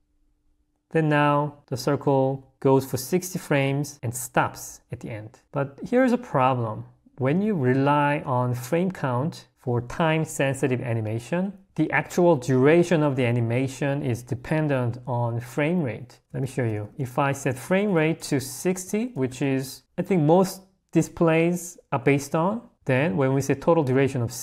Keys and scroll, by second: 16.2 0, 24.3 l.